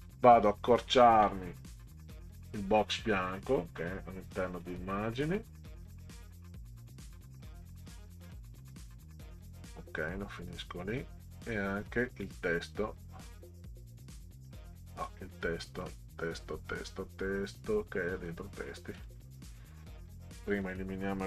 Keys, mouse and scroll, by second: 0.5 click, 2.4 click, 3.9 click, 4.6 click, 5.1 middle click, 7.2-9.2 drag, 10.4 click, 11.4 click, 15.0 click, 18.2 click, 19.0 click, 20.4 click, 20.6 click.